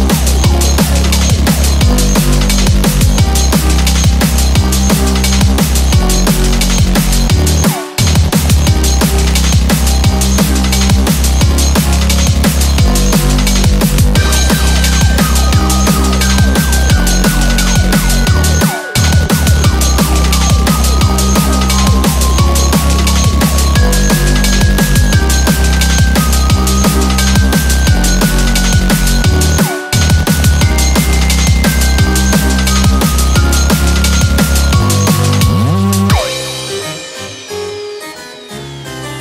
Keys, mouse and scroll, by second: 0.4 click, 1.9 i, 6.2 1, 6.7 scroll up 1, 7.9 click, 10.5 g, 12.1 click, 12.1 g, 12.2 g, 13.3 click, 13.3 g, 13.5 g, 14.9 click, 14.9 g, 14.9 g, 17.5 click, 17.7 g, 19.1 click, 19.1 g, 19.3 g, 20.9 click, 20.9 g, 21.1 g, 23.8 click, 23.9 g, 25.6 click, 25.6 g, 25.7 g, 27.7 click, 27.7 g, 27.8 g, 29.7 click, 29.7 g, 30.0 g, 33.0 click, 33.1 g, 36.5 click, 36.6 g, 38.7 click, 38.8 g.